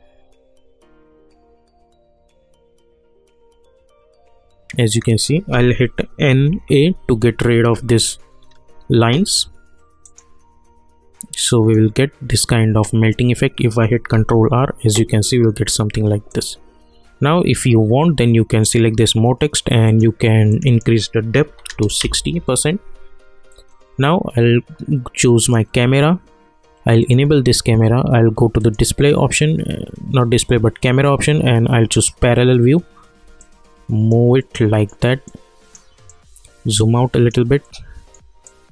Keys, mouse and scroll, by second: 4.8 click, 6.1-7.2 typing, 8.3 scroll up 1, 10.0 click, 14.1 ctrl+r, 16.3 click, 18.6 click, 22.0 Return, 25.4 click, 31.8 click, 33.4 alt+click, 34.4 alt+middle click, 35.2-37.6 alt+right drag, 37.6 alt+middle click, 38.4-38.7 alt+drag.